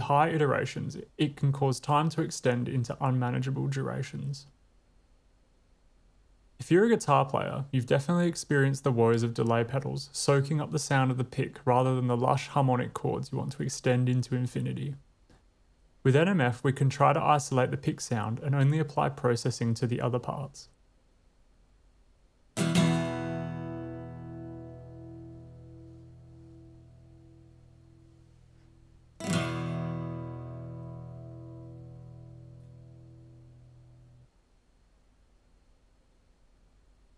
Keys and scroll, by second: 21.7 w, 22.5 space, 34.2 space.